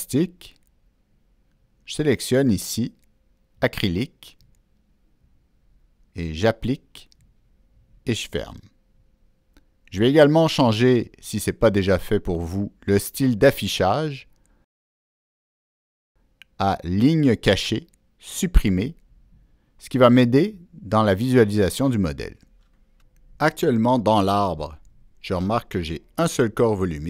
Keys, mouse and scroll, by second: 0.8 click, 6.4 click, 9.3 click, 10.9 click, 13.5 click, 16.9 click, 19.9 click, 21.3 click, 25.4 click.